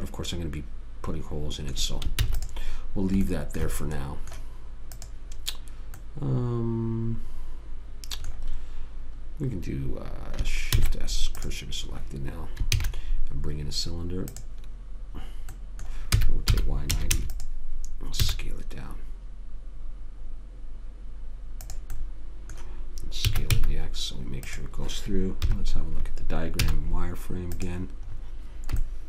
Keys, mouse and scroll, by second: 2.5 ctrl+s, 5.3 click, 11.0 shift+s, 13.1 shift+a, 16.5 r, 18.6 s, 23.6 s, 25.8 KP_3, 26.9 z.